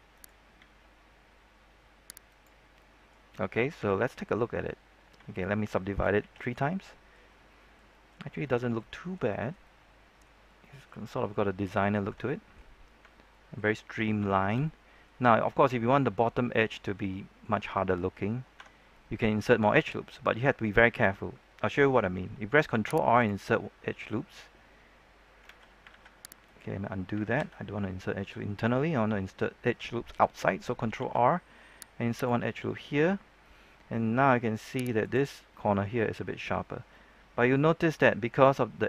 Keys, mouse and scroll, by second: 0.1 right click, 2.2 click, 2.5 scroll down 1, 2.7 middle click, 3.7 typing, 4.5-5.1 scroll up 1, 5.1 Tab, 6.1 ctrl+3, 6.5 middle click, 7.2 scroll up 1, 7.4 middle click, 8.2 scroll down 1, 8.4 middle click, 9.4 scroll down 1, 9.6 middle click, 10.3 scroll up 1, 10.5 middle click, 13.0-13.7 scroll down 2, 13.3 middle click, 13.7 middle click, 14.2 shift+middle click, 16.6 shift+middle click, 17.2 middle click, 18.5 Tab, 18.9-21.3 middle drag, 22.7 ctrl+r, 23.1 click, 25.5 z, 26.4 right click, 27.3 ctrl+z, 30.9 ctrl+r, 32.1 click, 35.2 middle click, 36.5-36.9 scroll up 1, 36.9 middle click, 38.5 scroll up 1, 38.7 middle click.